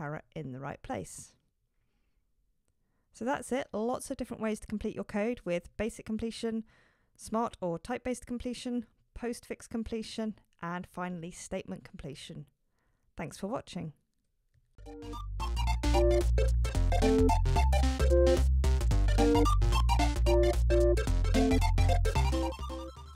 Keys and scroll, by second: 1.5 shift+super+Return.